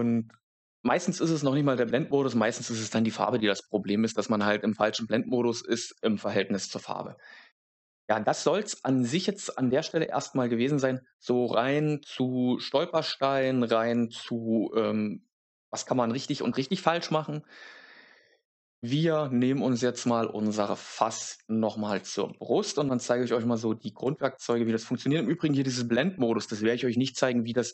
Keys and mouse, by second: 20.0 click, 21.2 click, 24.0 click.